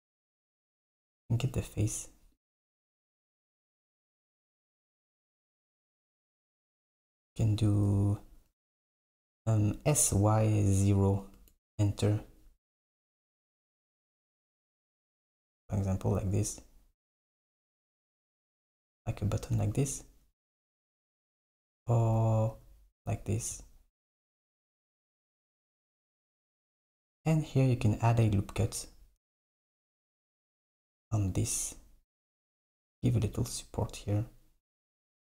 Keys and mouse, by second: 0.7-2.5 drag, 2.7 shift+click, 3.1 shift+drag, 3.7 shift+click, 4.5 shift+click, 5.0 shift+click, 7.8 s, 12.8 g, 15.5 Tab, 15.8 click, 17.3 super+click, 17.3 super+right click, 21.3 z, 22.2 z, 22.6 z, 24.5 g, 29.7 ctrl+r, 35.1 Tab.